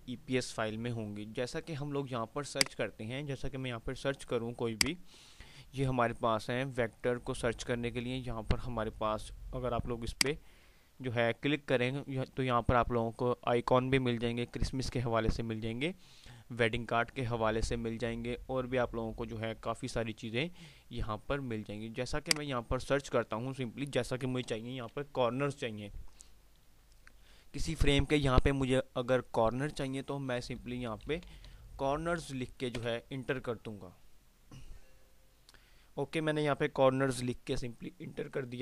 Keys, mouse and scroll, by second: 10.2 click, 22.3 click, 22.3 typing.